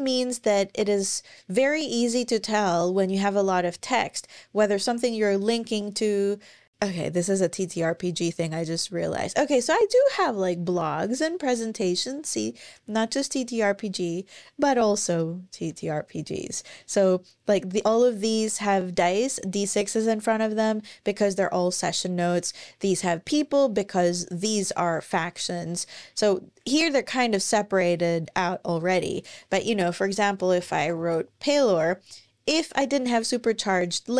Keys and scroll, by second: 15.5 Escape, 29.7-30.8 typing, 32.8 typing.